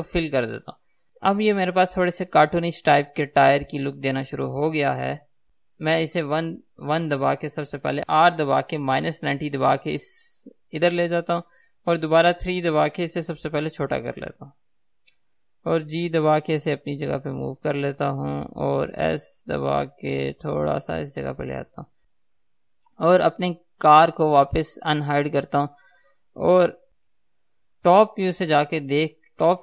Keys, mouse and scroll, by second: 4.0 Tab, 5.0-5.6 scroll down 1, 5.6 KP_3, 6.4 KP_1, 8.1 r, 11.2 click, 12.2 KP_3, 13.6 s, 14.8 click, 15.8 g, 18.1 click, 19.1 s, 22.1-25.1 middle drag, 22.1 KP_3, 25.1-27.0 drag, 27.0-29.6 middle drag, 27.0 KP_6, 27.5 KP_7.